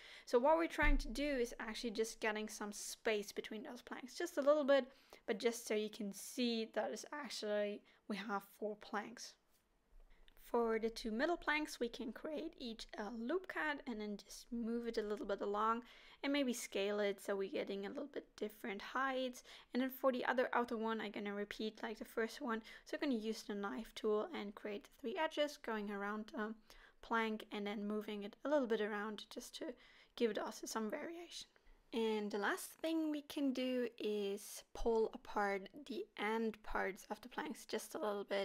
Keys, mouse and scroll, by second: 0.6 g, 1.7 middle click, 2.4-3.2 scroll down 3, 3.3 ctrl+r, 6.0 s, 8.6 ctrl+r, 10.9 s, 15.6 middle click, 16.7 alt+a, 17.6 l, 18.7 shift+h, 19.1 middle click, 19.7-20.6 scroll up 6, 20.1 shift+middle click, 21.4 k, 25.4 middle click, 26.0 scroll down 4, 26.4 middle click, 27.4 middle click, 28.2 shift+middle click, 28.3 scroll up 2, 28.8 k, 31.1 k, 32.7 scroll down 7, 32.9 middle click, 33.3 middle click, 33.4 scroll up 3, 33.8 alt+h, 34.0 middle click, 34.2-34.6 scroll up 4, 34.5 middle click, 35.2 click, 35.6-35.9 scroll down 4, 35.9 middle click, 36.3 KP_7, 37.0 g, 38.1 middle click.